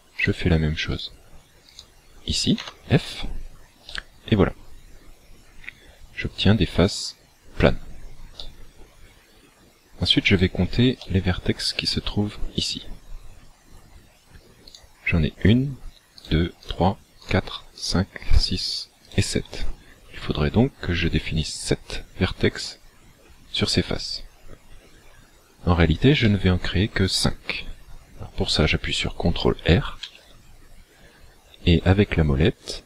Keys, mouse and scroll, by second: 0.2 shift+right click, 0.9 right click, 1.8 shift+right click, 2.6 f, 3.9 middle click, 8.4 shift+middle click, 10.4 alt+right click, 11.0 middle click, 12.9-13.4 scroll up 3, 14.7 right click, 16.2 shift+right click, 16.6 shift+right click, 17.2 shift+right click, 17.8 shift+right click, 18.4 shift+right click, 19.0 shift+right click, 25.4 scroll down 2, 26.3 shift+middle click, 30.0 ctrl+r.